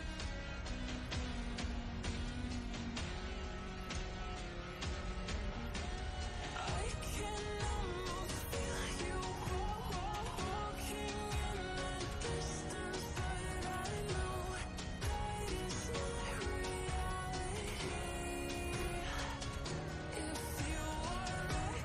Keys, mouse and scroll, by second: 2.1 ctrl+space, 2.2-3.3 ctrl+click, 2.4 ctrl+space, 2.7 click, 2.9 space, 3.5 click, 3.6 space, 3.9-4.8 ctrl+click, 4.1 ctrl+space, 4.5 click, 4.6 space, 5.3 right click, 5.9 click, 6.5 right click, 8.4-9.3 shift+drag, 18.6 ctrl+space, 18.7-19.8 ctrl+click, 18.9 ctrl+space, 20.1 ctrl+space, 20.2-21.3 ctrl+click, 20.4 ctrl+space.